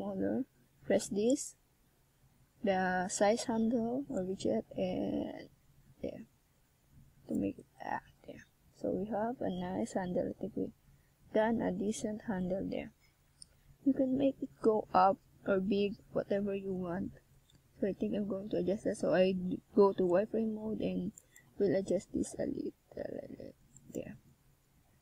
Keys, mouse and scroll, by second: 0.2 s, 0.6 click, 1.5 e, 4.8 click, 5.1 s, 6.5 click, 7.0 e, 10.4 click, 10.7 s, 12.3 click, 12.6-13.1 shift+scroll down 1, 13.1 scroll up 2, 13.8 e, 14.4 click, 15.1 click, 15.7 s, 16.6 click, 17.1 e, 17.3 click, 17.7 s, 18.6 click, 19.2 click, 24.6 s.